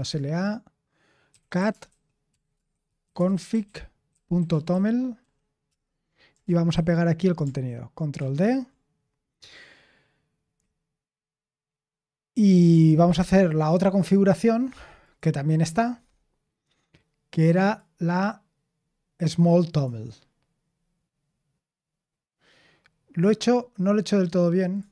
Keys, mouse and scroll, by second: 0.0-5.7 typing, 6.7 ctrl+v.